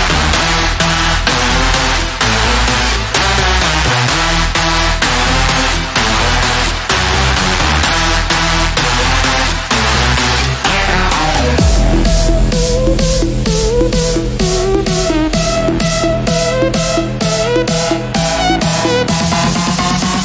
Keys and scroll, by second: 2.6 e, 13.4 ctrl+r.